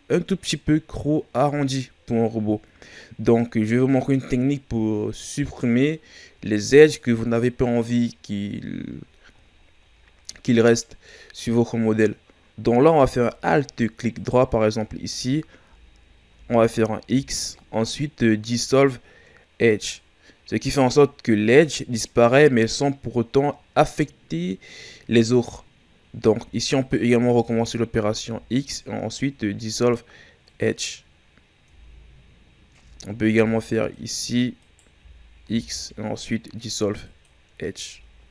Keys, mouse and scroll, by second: 9.6-11.3 shift+scroll up 2, 11.5 scroll up 2, 12.1 scroll down 1, 14.1 alt+right click, 17.1 x, 26.8 alt+right click, 28.2 x, 31.7 Tab, 32.8 Tab, 33.9 alt+right click, 34.6 alt+right click, 35.5 x, 37.9 Tab.